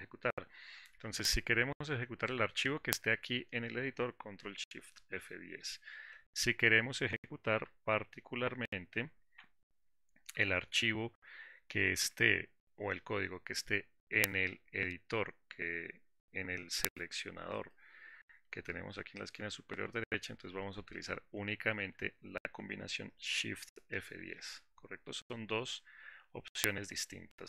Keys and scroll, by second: 4.7 shift+F10, 10.5 alt+4, 24.3 shift+F10.